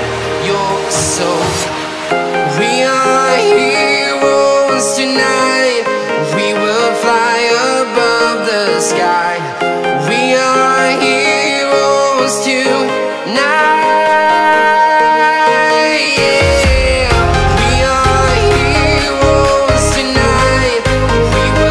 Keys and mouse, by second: 0.9 shift+a, 6.0-7.9 drag, 9.5-12.3 drag, 14.0 middle click, 15.8-17.2 drag, 20.1 click.